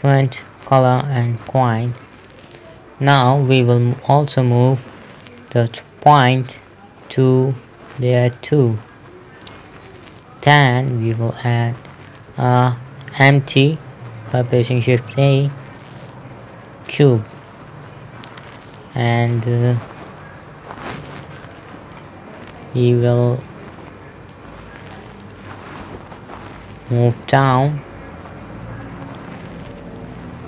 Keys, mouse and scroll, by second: 0.4 middle click, 2.0 shift+middle click, 4.8 m, 8.6 click, 11.6 shift+Num_Lock, 12.8 a, 17.3 click, 17.9 middle click, 20.7 KP_7, 22.0 middle click, 22.6 scroll down 1, 23.6 click, 26.5 KP_3, 29.3 click.